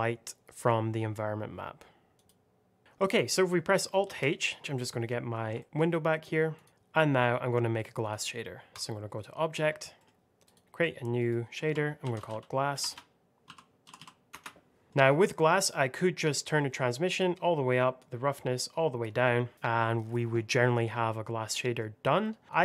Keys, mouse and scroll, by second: 2.0 click, 2.8 scroll up 1, 3.0 click, 4.0 alt+h, 4.6 middle click, 5.5 shift+middle click, 5.6 middle click, 6.5 click, 7.9 click, 9.5-9.9 scroll down 1, 9.9 middle click, 10.3 click, 11.9-13.7 typing, 14.8-16.3 scroll up 1, 16.3 click, 21.5 middle click, 22.0-22.4 scroll down 1, 22.4 click.